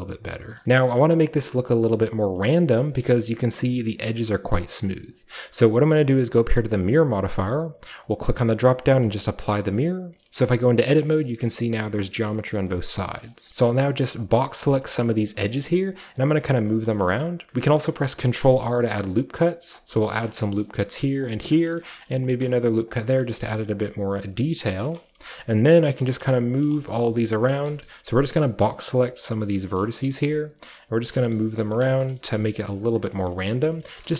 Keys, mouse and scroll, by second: 0.1-0.4 shift+scroll down 1, 0.4 shift+scroll up 2, 0.6 shift+middle drag, 0.9-2.3 shift+middle drag, 2.5-2.9 shift+middle drag, 2.6-4.0 shift+scroll up 2, 3.0-8.0 shift+middle drag, 4.0-5.7 shift+scroll up 1, 5.7-6.5 shift+scroll up 1, 6.5-8.0 shift+scroll up 1, 8.0 click, 8.9 click, 9.3-12.5 scroll down 3, 9.4-10.5 middle drag, 10.6-11.7 middle drag, 11.4 a, 11.6 a, 12.1 middle click, 12.3 middle click, 12.5-13.5 scroll up 1, 12.5 middle click, 12.7-15.8 typing, 13.1 middle click, 13.3 middle click, 13.5-14.2 scroll down 1, 14.2 click, 14.8 click, 16.1 click, 16.9 typing, 18.1 ctrl+r, 19.7 click, 20.4-22.2 shift+scroll up 1, 21.2 ctrl+click, 22.9 click, 23.3-27.8 typing, 23.7 click, 24.6 click, 25.3 click, 25.9 click, 26.5 click, 26.8-28.6 shift+middle drag, 27.4 shift+click, 28.4 shift+click, 29.0-34.1 typing, 29.3 click, 29.6 shift+middle click, 29.6-30.5 shift+scroll up 1, 30.1 shift+click, 30.8 click, 31.0 click, 31.4 click, 32.2 shift+middle click, 32.3 shift+click, 32.8 click, 33.1-34.1 scroll down 1.